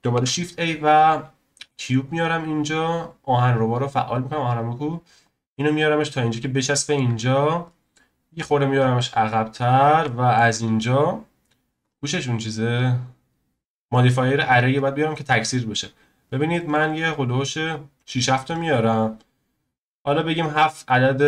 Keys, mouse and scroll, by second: 0.1 shift+a, 2.0 scroll up 1, 4.5 click, 5.2 click, 6.1 scroll up 2, 6.4-7.4 shift+middle drag, 7.4 scroll down 1, 7.7-8.3 middle drag, 8.3 click, 9.8 scroll down 1, 10.0-11.8 shift+middle drag, 11.8 click, 12.7 click, 13.9-19.1 drag, 19.1-20.3 scroll up 1, 20.8 click.